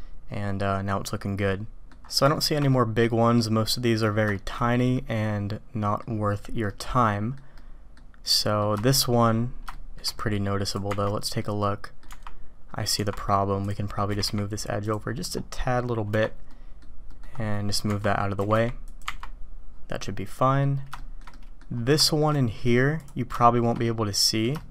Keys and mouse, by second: 2.3 shift+click, 2.7-4.0 drag, 4.3 shift+click, 4.9-6.0 drag, 6.6-7.3 drag, 7.6-8.0 drag, 8.3-8.6 middle drag, 8.8 shift+click, 9.7-10.0 shift+drag, 10.2 middle click, 11.3-12.0 drag, 14.0 g, 16.5 Tab, 16.5 click, 17.1 click, 18.4 g, 19.0 Tab, 20.0-20.6 drag, 20.9 shift+middle click, 21.3 click, 22.0 shift+middle drag, 22.3 click, 22.3 right click, 22.9 click, 23.3-23.7 shift+drag, 23.8-24.4 drag, 23.8-24.4 right drag, 24.6 shift+middle drag.